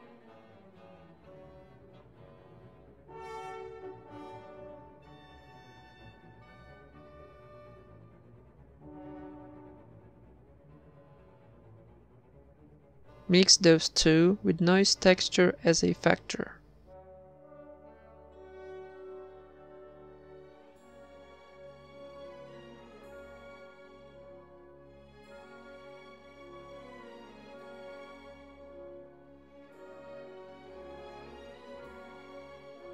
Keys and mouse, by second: 1.2 click, 10.6-11.8 right drag, 10.8 shift+d, 11.8 click, 12.7-14.0 drag, 14.0 middle click, 14.4 shift+a, 16.9-18.0 drag, 19.4 click, 21.5 click, 24.8 click, 26.8 middle click, 27.3 shift+a, 31.8 click, 32.8 a.